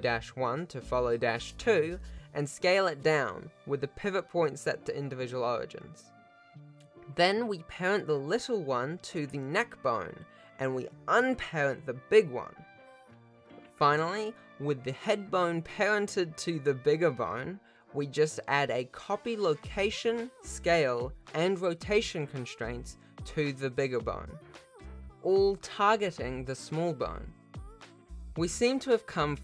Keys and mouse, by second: 2.6 shift+click, 7.0 Tab, 9.6 ctrl+p, 10.6 alt+a, 11.3 click, 12.3 alt+a, 12.6 click, 13.3 ctrl+Tab, 13.9 r, 16.0 click, 16.8 click, 22.8 click, 23.7 shift+click, 25.9 ctrl+shift+click, 28.2 r, 28.6 click.